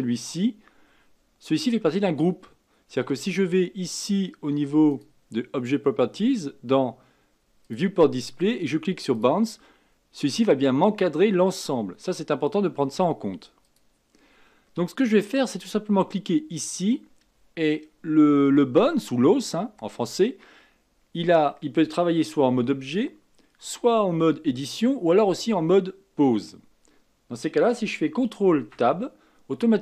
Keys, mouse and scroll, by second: 0.6-3.8 scroll down 2, 4.8 click, 7.6-9.2 drag, 13.6 click, 14.1-15.0 scroll up 3, 15.0-15.9 scroll down 1, 16.5 click, 28.5 ctrl+Tab.